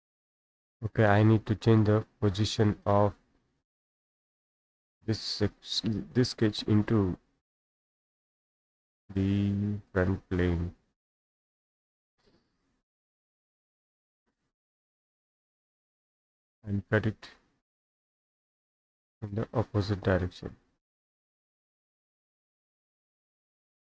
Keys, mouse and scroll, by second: 0.0-1.0 drag, 1.7 Escape, 2.1 Escape, 2.9 click, 5.1 click, 7.6 click, 9.9 click, 12.1 click, 13.5 click, 15.5 click, 16.1 Escape, 16.8 click, 18.5 click, 21.9-23.9 drag.